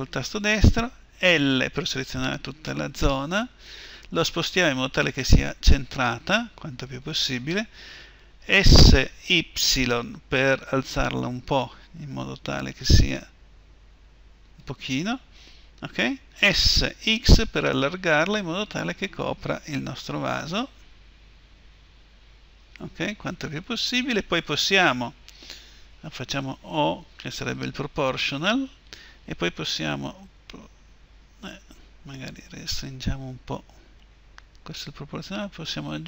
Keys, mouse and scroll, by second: 1.1 l, 3.5 g, 8.4-9.4 drag, 8.4 s, 16.3 s, 28.6-30.8 drag, 28.6 o, 29.9 g.